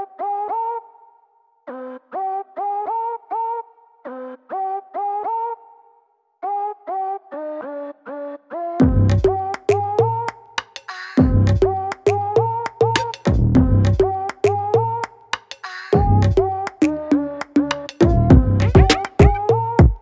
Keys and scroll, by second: 1.1 ctrl+b, 3.1 Return, 3.1 ctrl+z, 3.3-4.3 typing, 4.5 ctrl+z, 5.8-8.6 typing, 7.1 ctrl+z, 10.3 ctrl+0, 10.4 v, 11.6-12.8 typing, 14.9 ], 15.0 ], 17.0 ctrl+z, 19.4 ctrl+-.